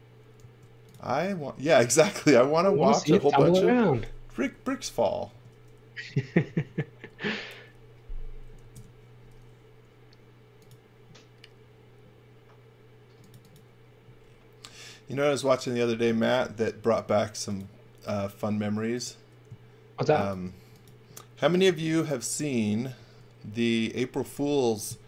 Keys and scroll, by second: 0.4 a, 5.3 space, 6.4 a, 8.5 1, 8.7 Return, 8.7 2, 16.4 l, 21.6 e.